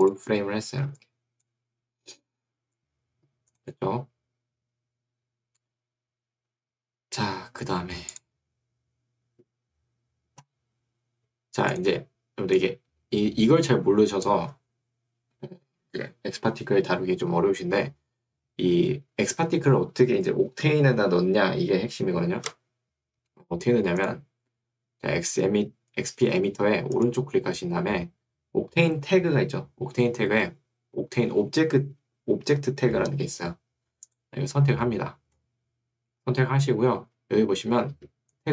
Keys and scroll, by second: 0.9 2, 2.7 Escape.